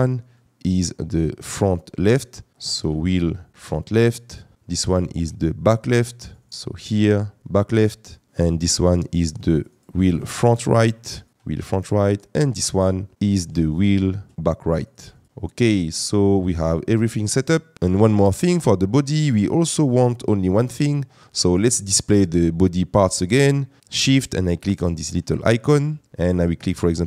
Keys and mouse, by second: 3.5 click, 12.1 click, 24.6 shift+click.